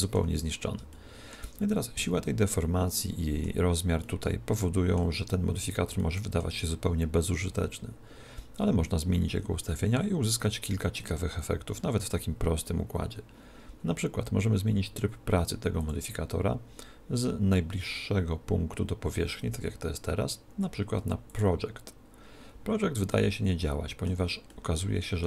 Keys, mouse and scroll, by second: 2.0 z, 3.0 z, 15.8 click, 23.1-25.2 middle drag.